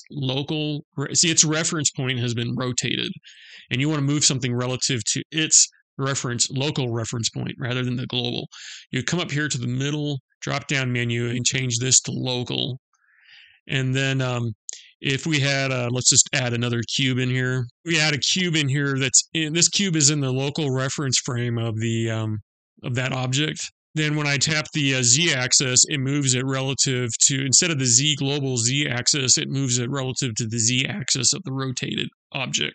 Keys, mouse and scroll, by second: 9.5 click, 15.6 shift+a.